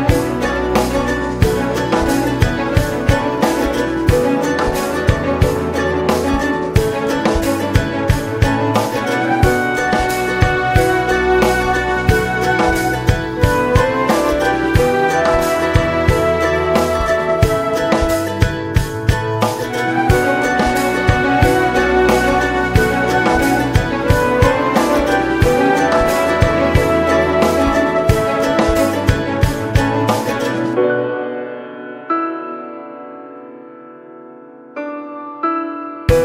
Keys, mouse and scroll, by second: 0.2-17.1 drag, 17.1 alt+middle click, 17.4 alt+middle click, 18.7 shift+middle click, 19.7 r, 23.6 scroll down 2, 23.9 middle click, 24.2 scroll up 2, 24.6 middle click, 24.7-25.1 scroll up 1, 25.1 s, 27.6-29.6 drag, 29.6 middle click, 29.8 scroll up 1, 30.3 shift+middle click, 31.1 ctrl+s, 31.4 click, 31.7 shift+middle click, 32.5-34.1 drag, 34.1-35.2 scroll up 2, 35.2-36.2 middle drag.